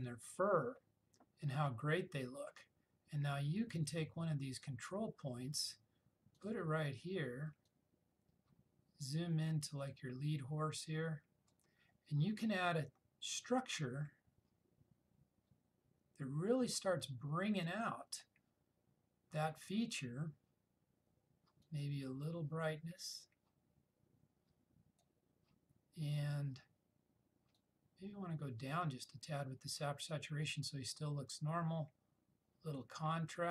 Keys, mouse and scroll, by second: 3.9-11.8 drag, 21.7-25.2 drag, 27.6-28.9 drag, 32.9-33.5 drag.